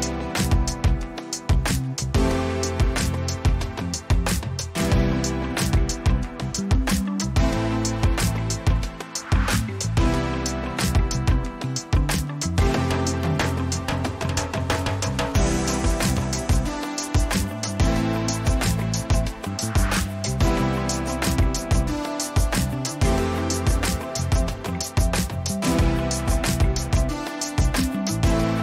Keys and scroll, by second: 6.3 Return, 17.4-18.8 typing, 21.5 ctrl+a, 21.8 3, 22.3 Return, 22.8 ctrl+a, 24.1 3, 24.6 Return.